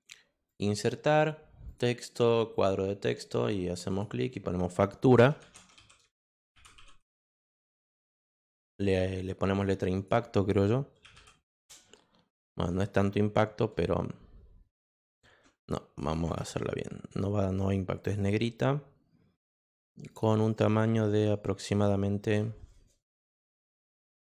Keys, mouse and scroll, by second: 0.4 click, 1.6 click, 2.5 click, 3.7 Return, 3.8 click, 5.1-7.2 typing, 8.6 click, 8.7 click, 9.9 click, 10.7-11.6 typing, 11.8 Return, 15.4 ctrl+z, 16.0 click, 16.4 ctrl+z, 18.0 click, 20.1 click, 20.3 click, 20.5 click, 21.7 click, 23.6 click.